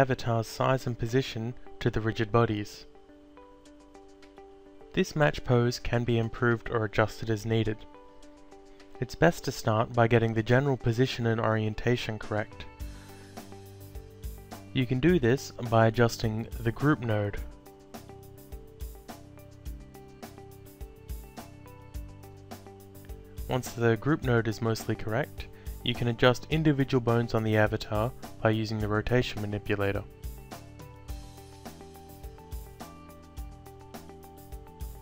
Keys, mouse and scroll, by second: 1.6 alt+click, 4.6 alt+middle click, 18.6 click, 18.9 alt+click, 22.1 e, 23.1 click, 27.2 alt+click, 28.9 ctrl+z, 30.2 click, 33.2 click, 33.5 alt+click.